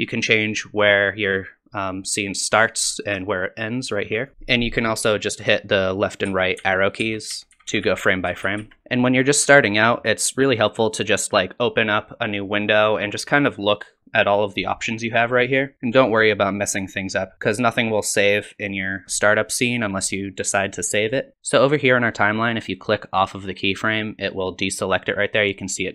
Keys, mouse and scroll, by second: 0.4 click, 3.4 click, 6.3 Left, 6.6 Right, 7.0 Left, 7.3 Right, 7.5-8.0 Right, 8.3 Left, 23.8 click.